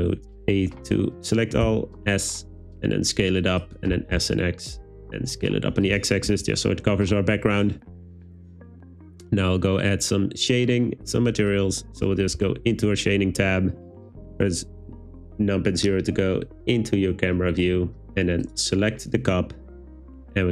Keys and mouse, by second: 1.7 s, 3.6 click, 4.0 s, 4.2 x, 6.3 Tab, 18.5 click.